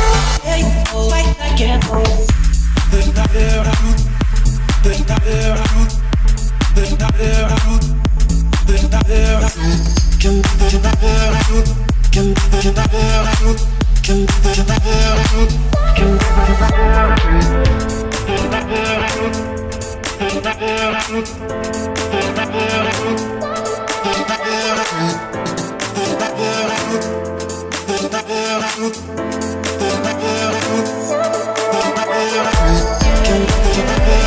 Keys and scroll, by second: 2.6 Return, 6.6 1, 6.7 0, 6.9 Return, 10.9 Escape, 18.3 o, 21.8 Escape, 26.3 Escape, 26.7 o.